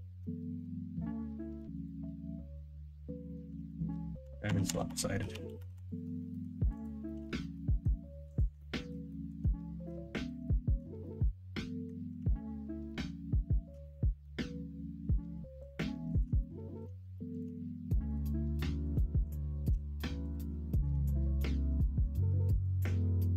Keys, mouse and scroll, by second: 0.8 middle click, 1.4 alt+z, 2.0-3.3 middle drag, 3.5-6.0 ctrl+z, 6.3 middle click, 7.0 middle click, 7.4 alt+z, 7.5 middle click, 8.5 middle click, 9.0 middle click, 9.8 middle click, 10.4 middle click, 11.0 middle click, 14.2-15.5 middle drag, 16.4 middle click, 18.4 middle click, 20.7 middle click, 20.8 x, 21.8 middle click.